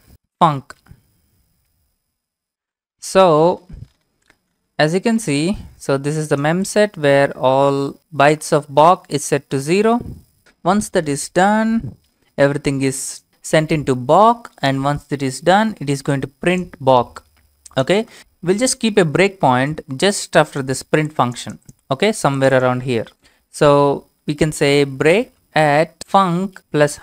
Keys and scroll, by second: 0.0-1.3 typing, 24.3-27.0 typing.